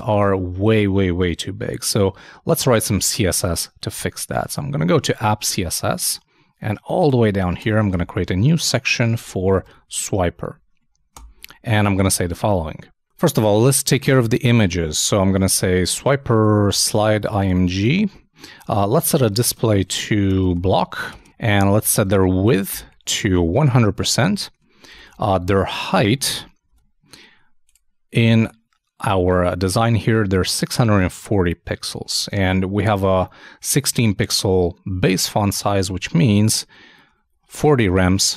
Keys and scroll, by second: 2.1 super+Tab, 7.8 super+Return, 7.9 super+/, 8.9 shift+super+s, 9.2 shift+w, 17.5 shift+space, 17.6 shift+[, 17.8 shift+Return, 22.0-24.0 typing, 25.2-26.1 typing, 26.6 shift+super+space, 26.7 super+Tab, 32.1 super+i, 32.4 super+Tab.